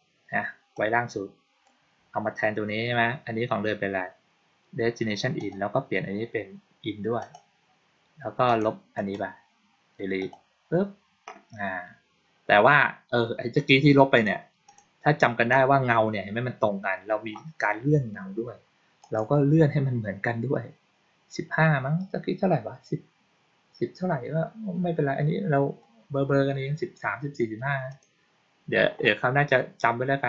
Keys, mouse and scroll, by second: 0.6 click, 5.2 click, 7.1 click, 8.3 click, 8.8 right click, 10.1 click, 14.0 click, 14.5 click, 18.9 click, 19.5-24.3 middle drag, 27.8 click.